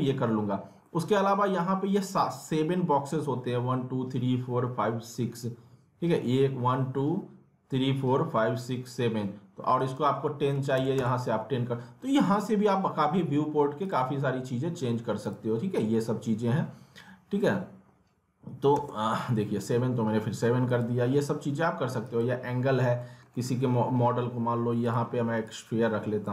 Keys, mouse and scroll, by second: 0.5-0.8 scroll down 1, 0.8 middle click, 9.8 click, 13.8 click, 20.7 click, 22.6-23.0 scroll up 1, 23.0 middle click, 23.3-24.8 scroll up 1, 24.8-26.3 drag.